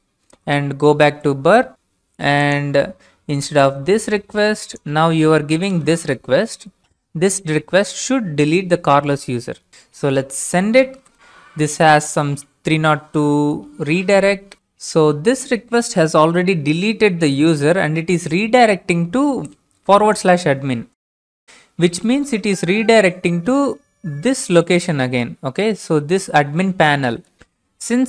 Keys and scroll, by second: 0.3 alt+Tab, 5.7 ctrl+v, 10.9 ctrl+space, 21.0 alt+Tab, 22.2 alt+Tab, 22.4 alt+Tab.